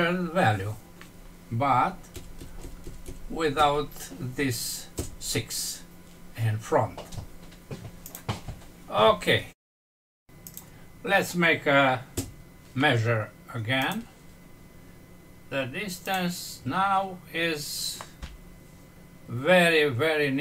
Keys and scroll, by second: 2.1 Left, 4.9 BackSpace, 9.7 F6.